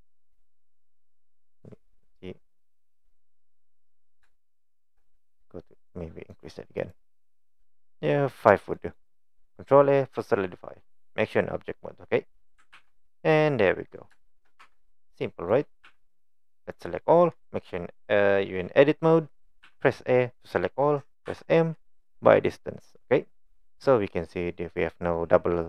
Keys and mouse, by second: 0.4 click, 1.9-3.4 middle drag, 4.4-4.9 shift+middle drag, 6.3 click, 8.8 click, 9.5 click, 12.8 ctrl+a, 14.3 shift+middle click, 14.6 Tab, 14.8 middle click, 15.9 a, 16.7 click, 19.7 a, 21.3 m, 22.9 click.